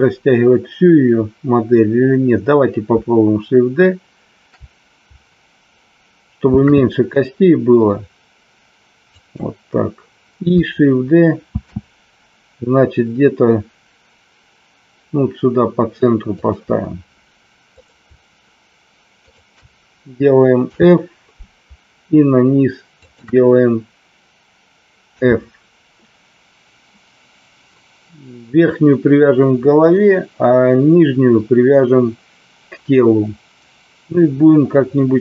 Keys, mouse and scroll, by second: 6.5 shift+d, 9.0 click, 11.5 shift+d, 16.4 click, 17.6 click, 19.1 shift+click, 20.6 f, 23.0 shift+click, 25.1 f.